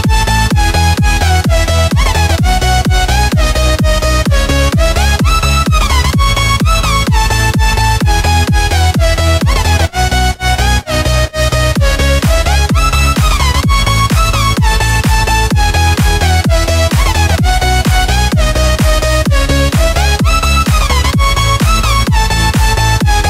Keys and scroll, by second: 1.2 space, 1.7 alt+super+space, 1.8 alt+super+space, 1.9 alt+super+space, 2.0-2.6 alt+super+space, 2.6 super+space, 2.7-3.2 typing, 3.3 alt+super+space, 3.4 alt+super+space, 3.5 alt+super+space, 3.7 alt+super+space, 3.8 alt+super+space, 4.0 alt+super+space, 4.1 alt+super+space, 5.8 alt+super+space, 7.2 space, 7.7 alt+super+space, 7.8-8.3 alt+super+space, 8.4-10.7 alt+super+space, 10.7 space, 11.2 super+space, 11.3-11.8 super+space, 14.0-16.5 typing, 19.4 space, 19.9 space, 20.9 space, 21.4 super+space, 21.5 super+space, 21.5 super+space, 21.6 super+space, 21.9 super+space, 22.1 super+space, 22.1 super+space.